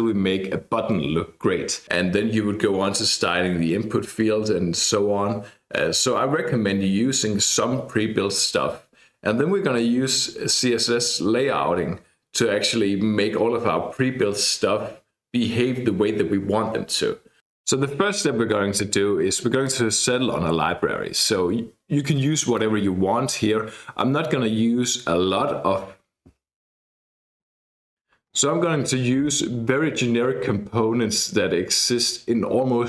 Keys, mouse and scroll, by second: 19.7-22.4 drag.